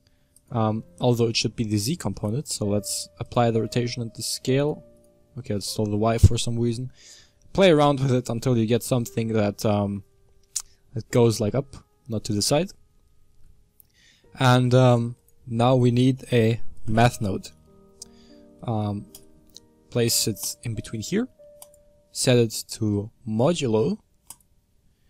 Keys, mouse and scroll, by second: 0.3 ctrl+shift+click, 1.2-2.1 middle drag, 2.1 ctrl+a, 4.5 ctrl+shift+click, 4.9 ctrl+shift+click, 5.8-6.4 middle drag, 6.4-7.3 scroll up 3, 7.3-8.0 scroll up 1, 8.0-9.0 middle drag, 9.0-9.9 scroll down 2, 9.9-11.8 scroll down 1, 11.8-20.4 middle drag, 24.3 click.